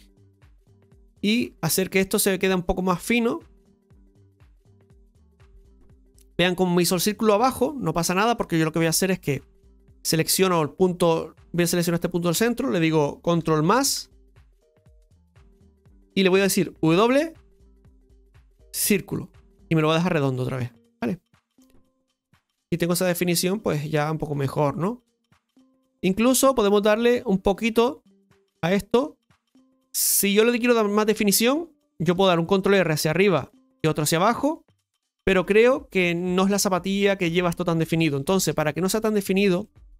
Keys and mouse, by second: 4.0-4.6 middle drag, 4.8-5.2 shift+middle drag, 6.9 Tab, 7.3 shift+middle click, 8.3 middle click, 10.1 middle click, 11.8 right click, 13.7-16.1 ctrl+KP_Add, 16.1 middle click, 17.9 w, 20.1 right click, 20.6 middle click, 21.9-25.8 middle drag, 27.0 shift+middle click, 27.7 Tab, 28.1 middle click, 28.7-30.8 middle drag, 35.3-36.5 middle drag, 38.9 ctrl+z, 38.9 middle click, 39.6 shift+middle click.